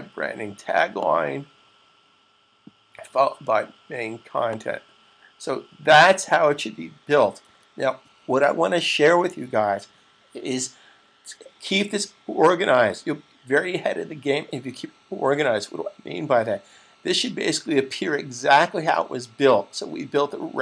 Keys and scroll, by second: 7.2 super+s.